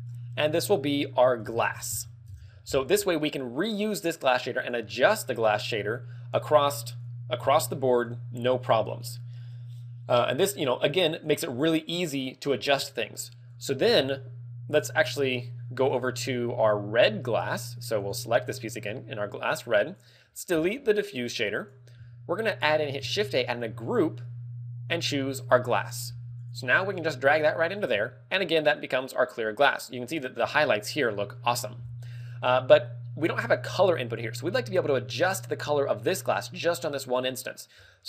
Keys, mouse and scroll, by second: 0.2 click, 2.6-3.1 scroll up 6, 4.3 click, 13.4 click, 17.9 right click, 19.8 click, 20.4 x, 21.3 click, 22.9 shift+a, 26.0 g, 26.4 click, 26.9 click, 28.3 click, 32.3 click.